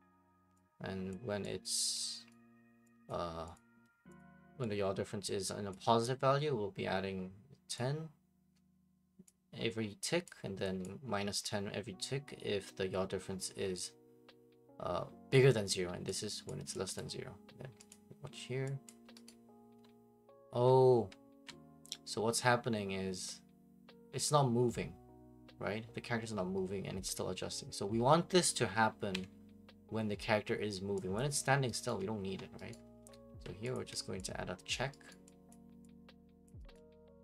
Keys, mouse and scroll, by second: 0.0-37.2 typing, 1.1 click, 1.9 click, 2.3 right click, 3.1 click, 3.5 click, 4.3 click, 5.7 click, 9.2 click, 10.3 click, 10.8 click, 15.7 click, 16.5 click, 17.0 click, 17.9 click, 18.9 click, 29.1 Escape, 31.2 click, 31.9 right click, 32.7 right click, 33.7 click, 34.7 click, 35.1 right click, 35.5 click, 36.5 click, 36.8 right click.